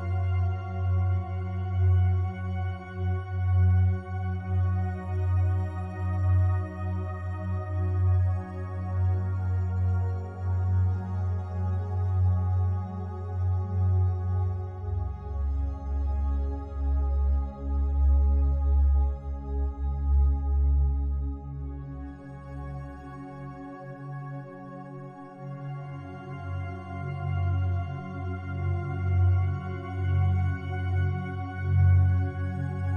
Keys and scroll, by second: 28.4 ctrl+t.